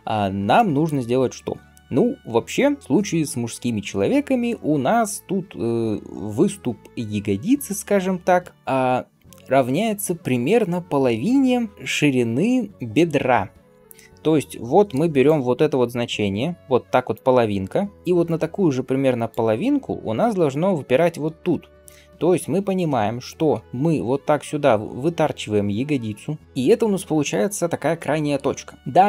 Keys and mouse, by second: 0.0-15.7 middle drag, 14.7-21.3 d, 15.1-26.4 drag, 23.4 g, 26.4-29.0 right drag.